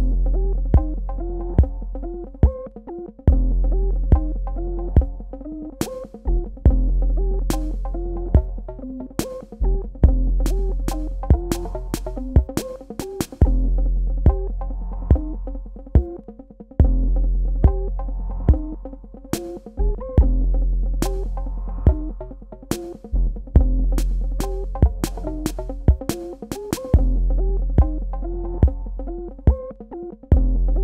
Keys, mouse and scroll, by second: 2.3 alt+click, 5.1 space, 5.4 click, 5.7 space, 7.1 click, 8.0 shift+click, 14.5 Delete, 15.1 click, 15.4 Delete, 16.2 click, 16.5 Delete, 17.7 click, 17.9 Delete, 18.7 click, 19.1 Delete, 19.8 click, 20.2 Delete, 21.0 click, 21.5 Delete, 22.3 click, 23.9 Delete, 24.9 click, 25.3 Delete, 26.8 click, 27.1 Delete, 27.8 click, 28.2 Delete, 28.9 click, 29.4 Delete, 29.9 click, 30.2 Delete.